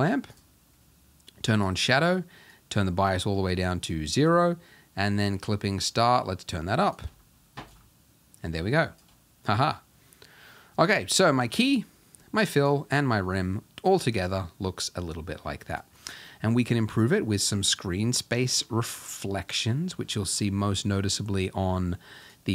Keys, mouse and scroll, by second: 1.6 click, 2.7-9.6 drag, 9.6-9.9 scroll down 1, 11.6 click, 12.6 click, 18.1 click, 19.0-19.7 scroll up 10, 19.7 middle click, 19.8 scroll down 1, 20.0 scroll up 1, 20.6-22.3 shift+middle drag, 22.3 click.